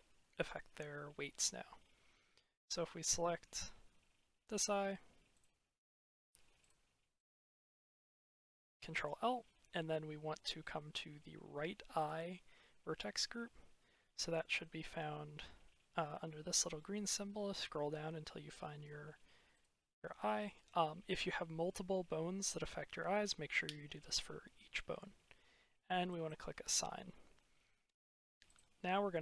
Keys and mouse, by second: 5.2 click, 8.3 ctrl+l, 11.9 click, 19.4 click, 26.1 click, 28.5-29.2 drag.